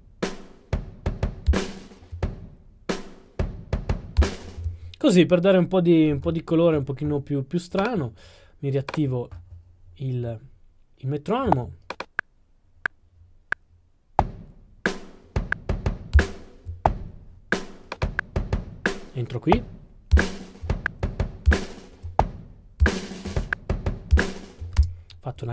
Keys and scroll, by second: 16.3 0, 23.3-24.2 typing.